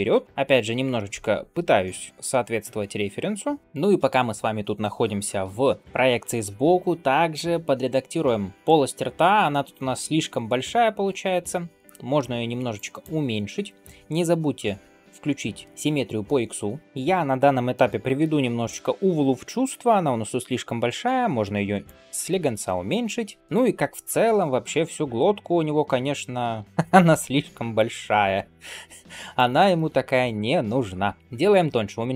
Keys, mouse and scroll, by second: 3.6 ctrl+KP_3, 3.6 shift+middle click, 10.9 alt+q, 12.6 click, 16.8 shift+middle click, 16.8 scroll down 2, 16.9 scroll up 2, 17.6 shift+middle click, 18.1-19.2 middle drag, 19.2 s, 22.3 shift+middle click, 22.6-22.9 scroll down 1, 22.9 middle click, 23.4 scroll up 2, 23.7 2, 24.2 alt+click, 24.6 shift+middle click, 24.9-26.5 middle drag, 26.9 s, 29.6 shift+middle click, 30.2 alt+click, 30.9 s, 31.9 middle click.